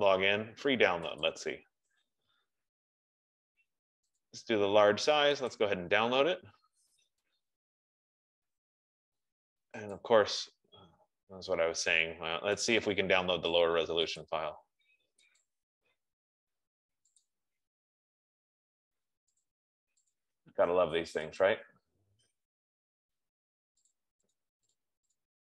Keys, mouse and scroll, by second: 1.8 click, 4.5 click, 5.9 click, 10.5 click, 13.1 click, 14.7 click, 15.9 click, 19.9 click, 20.6 click, 21.9 click, 24.3 click, 24.8 click.